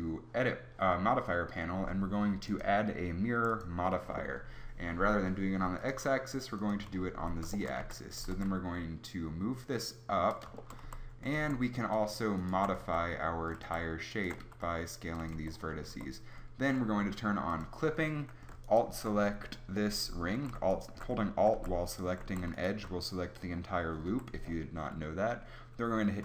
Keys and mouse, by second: 7.2 Tab, 7.8 a, 8.2 g, 10.9 a, 11.4 ctrl+Tab, 12.8 s, 13.6 a, 14.4 s, 15.3 Tab, 15.9 Tab, 20.4 a, 21.5 a, 22.3 a, 24.1 KP_3.